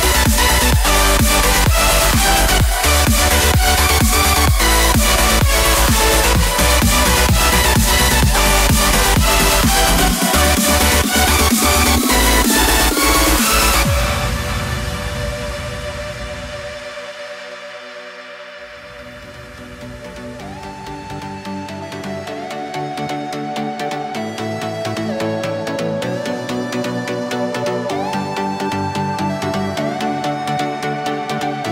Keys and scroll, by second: 22.1 w, 25.0 super+z, 25.6 super+z.